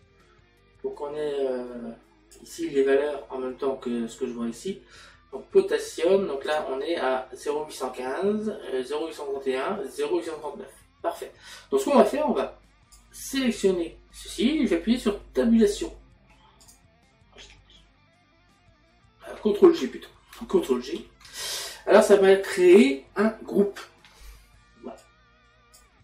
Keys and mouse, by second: 12.4 click, 16.7 click, 22.1 middle click.